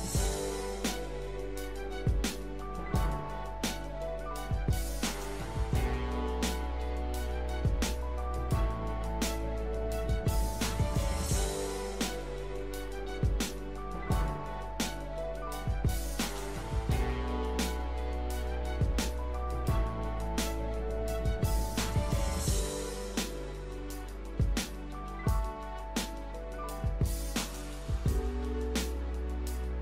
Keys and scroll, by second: 9.5 ctrl+z.